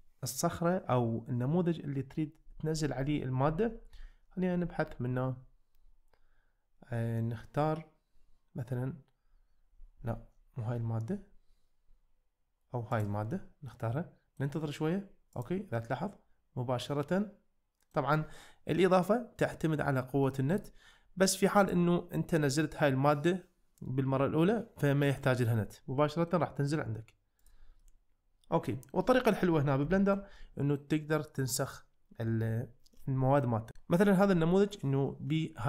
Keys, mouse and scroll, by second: 12.9 click, 13.8-14.4 middle drag, 15.3 click, 15.8-18.0 middle drag, 20.3 middle drag, 21.6 click, 25.8-26.3 middle drag, 27.4 click, 27.8-29.0 middle drag, 30.0 shift+middle click, 30.4-30.8 middle drag, 31.3-31.8 middle drag, 33.4 middle drag.